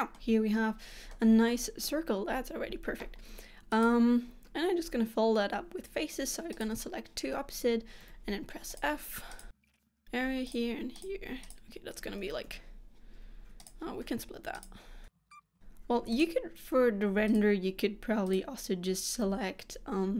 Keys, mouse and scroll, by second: 1.2 middle click, 2.2-2.6 scroll up 2, 3.8 click, 6.6 shift+click, 8.1 f, 8.8 click, 9.4 shift+click, 9.5 f, 9.6 click, 9.7 shift+click, 9.9 f, 10.0 click, 10.6 shift+click, 11.1 click, 11.6 shift+click, 12.6 f, 13.7 click, 14.7 shift+click, 15.2 f, 15.3 click, 15.4 shift+click, 15.5 f, 16.2 click, 17.4 shift+click, 18.4 click, 19.4 f.